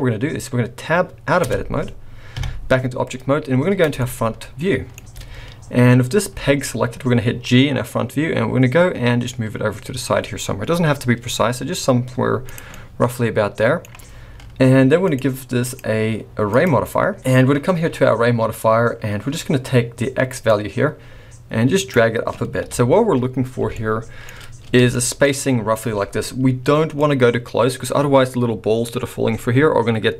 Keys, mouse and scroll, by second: 1.4 Tab, 2.3 KP_1, 3.0-3.6 scroll down 2, 3.6-3.9 scroll down 7, 3.9 shift+middle click, 6.3 g, 12.7 middle click, 15.0 click, 15.6 click, 20.5 click, 22.6 KP_1, 23.7 shift+middle click, 24.2-25.6 shift+scroll up 7, 24.9 shift+middle click, 27.0 click.